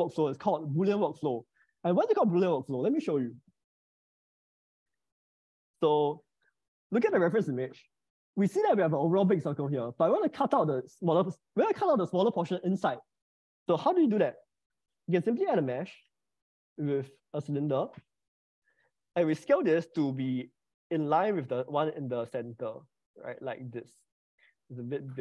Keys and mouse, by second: 5.3 click, 14.3-17.4 drag, 18.8 s.